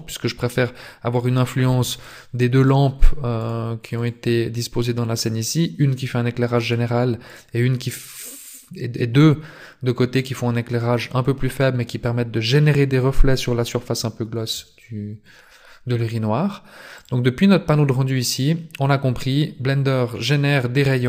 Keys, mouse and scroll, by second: 1.1 right click, 2.0 right click, 2.6 right click, 3.3 right click, 3.9 right click, 6.6 right click, 7.3 right click, 16.9 click.